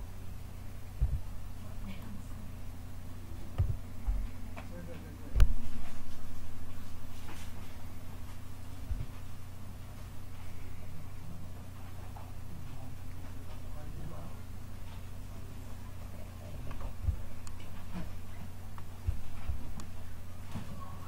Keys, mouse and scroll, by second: 0.9 Delete, 1.9-3.5 middle drag, 3.5 KP_0, 8.0 n, 13.8-15.4 drag, 18.2 middle click.